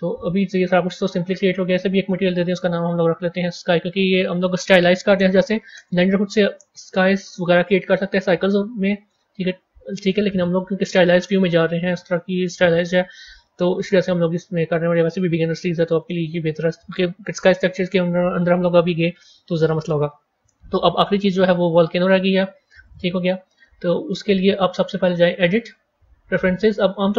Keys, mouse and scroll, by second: 2.4-3.9 drag, 4.0-7.1 drag, 23.5-25.4 middle drag, 25.4-27.0 drag.